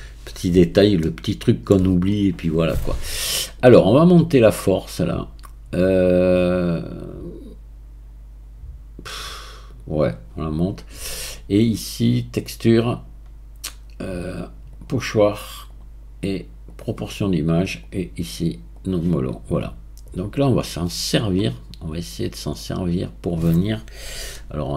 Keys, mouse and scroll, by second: 1.1-4.1 shift+middle drag, 4.1-12.2 drag, 12.8-16.8 drag, 20.0-21.9 right drag, 21.9-22.5 scroll up 2, 24.3-24.7 shift+middle drag.